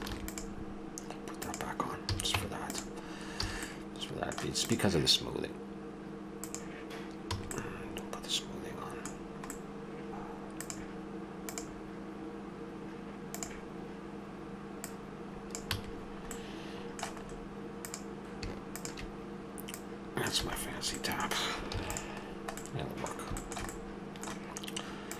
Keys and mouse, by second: 0.0 ctrl+r, 2.1 a, 2.4 Tab, 3.5 a, 4.6-6.8 drag, 7.3 a, 7.6-9.8 middle drag, 10.6-11.6 right drag, 14.9-16.1 drag, 15.7 a, 16.1 middle click, 16.4 click, 16.5-17.8 middle drag, 17.8-19.2 drag, 20.4 a, 20.6-22.6 middle drag, 21.7 ctrl+s, 23.4-25.0 middle drag.